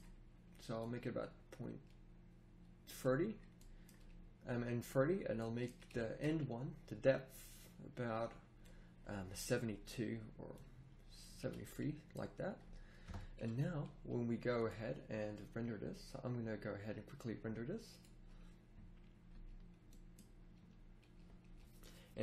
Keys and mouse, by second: 11.4 a, 13.0 KP_0, 17.1-18.3 middle drag.